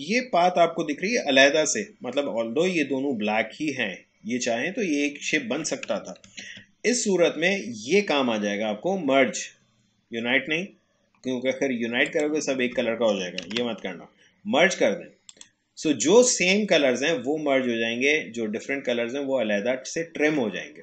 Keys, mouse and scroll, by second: 5.9 click, 6.3 ctrl+z, 12.1 click, 13.5 ctrl+z, 15.3 click.